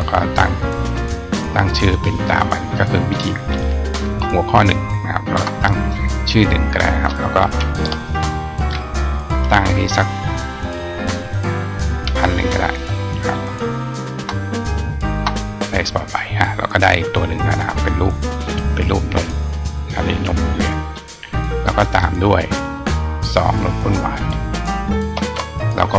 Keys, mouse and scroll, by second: 2.1-2.6 drag, 20.7 click, 21.8 click, 22.7-23.8 drag.